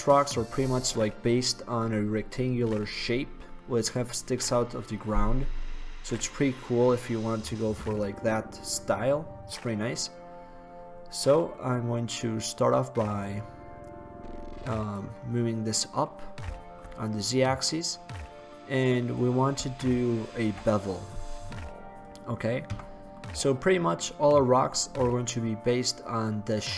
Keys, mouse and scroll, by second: 5.3-10.4 drag, 5.3-10.4 right drag, 10.4-12.2 middle drag, 13.3-15.1 drag, 18.2-20.1 middle drag, 20.5 ctrl+b, 22.3 click, 22.9 Tab, 23.1-25.1 middle drag.